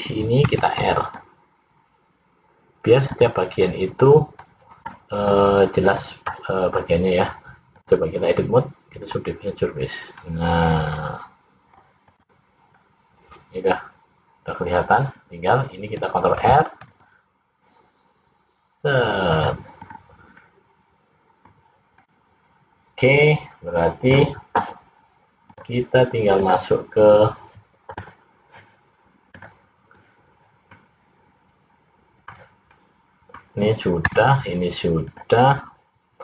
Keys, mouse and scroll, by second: 0.6 ctrl+r, 3.7 middle click, 5.4 middle click, 7.8 click, 10.2 middle click, 12.2 click, 12.9 middle click, 16.5 ctrl+r, 19.9 click, 20.4 middle click, 22.1 middle click, 25.5 click, 30.9 middle click, 32.9 middle click.